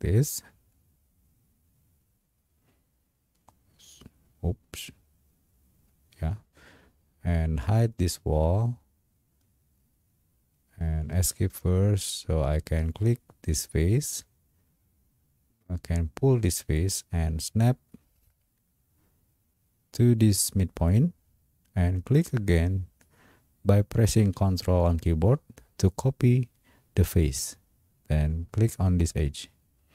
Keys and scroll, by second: 11.2 Escape.